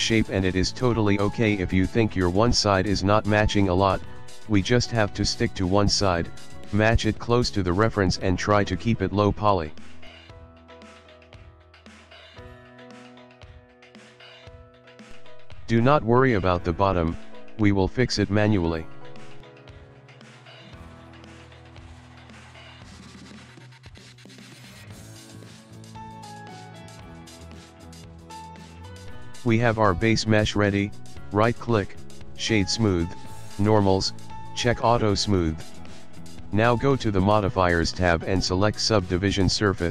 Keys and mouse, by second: 0.0 shift+middle click, 0.4 shift+middle click, 1.7 ctrl+r, 4.5 s, 7.5 ctrl+r, 13.3 ctrl+r, 14.7 s, 17.3 alt+click, 18.3 g, 20.1 s, 22.8 g, 25.2 ctrl+middle click, 25.6 shift+middle click, 26.0 shift+middle click, 27.3 click, 29.9 click, 30.7 click, 31.0 Tab, 31.4 click, 31.5 right click, 33.2 click, 34.0 click, 35.0 click, 36.1 click, 37.5 click, 38.4 click.